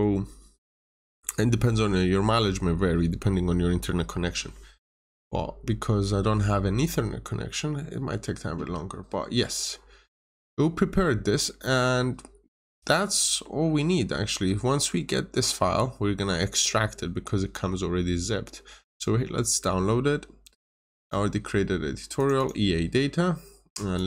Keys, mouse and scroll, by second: 21.7 click, 22.3 double click, 23.9 click.